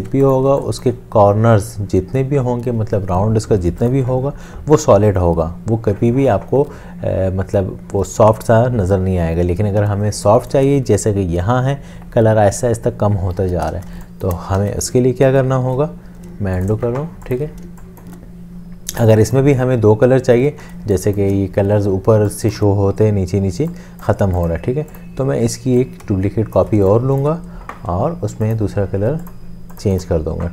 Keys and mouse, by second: 0.1 ctrl+7, 0.1 space, 0.5 space, 10.1 space, 13.9 space, 14.6 ctrl+z, 15.5 ctrl+z, 17.7 space, 26.2 alt+shift+click, 26.8 alt+shift+space, 27.3 space.